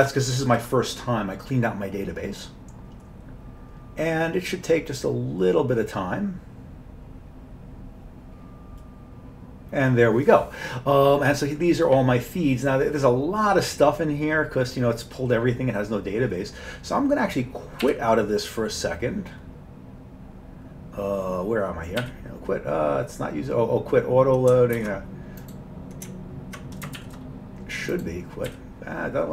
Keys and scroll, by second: 17.9 q, 22.0 q, 24.8 ctrl+g, 27.0 shift+q, 28.5 typing.